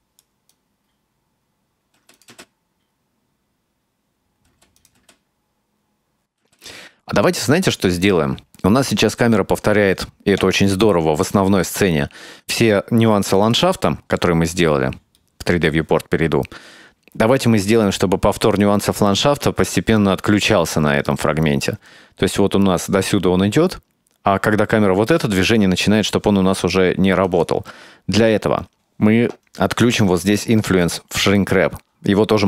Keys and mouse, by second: 0.1-1.4 drag, 1.5 space, 2.0 space, 2.2 click, 2.3 space, 4.5 space, 4.8 click, 5.0 space, 6.4 space, 6.5-9.0 drag, 11.6 click, 12.7-13.6 drag, 15.3-15.7 middle drag, 21.9-25.5 drag, 26.5 click, 28.6-30.5 drag.